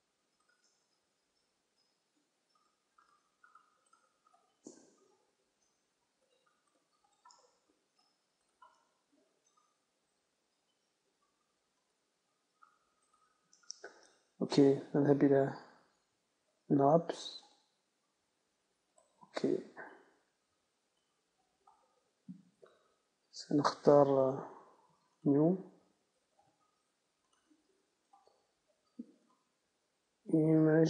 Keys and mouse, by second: 0.6-7.9 middle drag, 7.9-9.1 right drag, 9.1-14.6 middle drag, 14.6-16.6 right drag, 16.6 u, 21.2-22.2 drag, 22.2 right click, 22.5-30.8 drag.